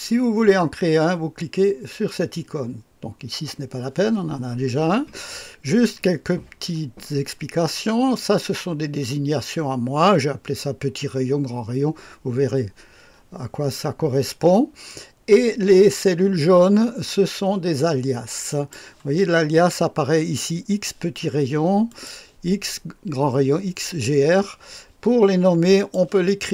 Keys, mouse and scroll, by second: 18.4 click, 21.8 click, 25.7 click.